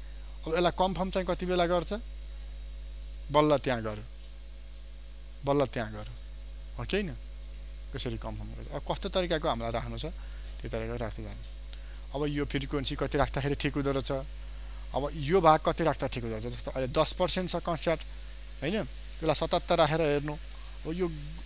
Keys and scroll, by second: 20.6 ctrl+d.